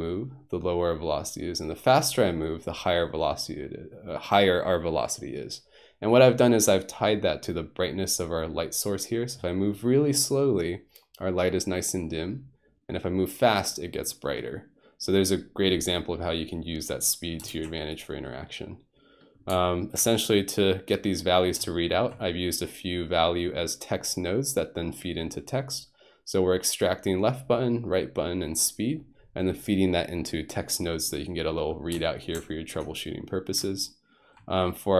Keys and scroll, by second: 17.5 alt+g.